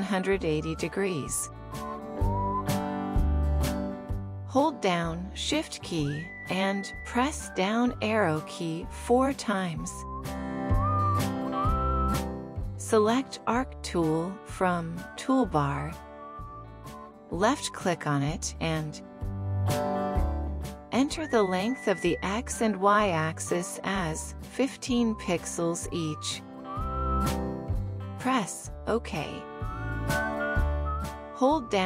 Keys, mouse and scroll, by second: 6.4 shift+Down, 7.2 shift+Down, 8.1 shift+Down, 9.2 shift+Down, 13.2-13.6 alt+scroll up 1, 16.2 right click, 20.1 alt+click.